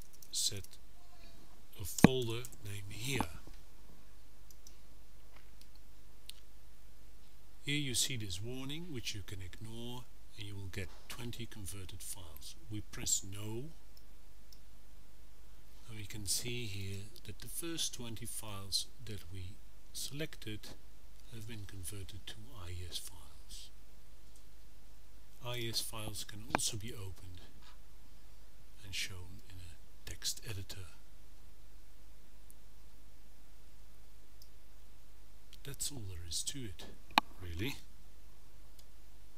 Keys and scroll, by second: 0.0-3.8 typing.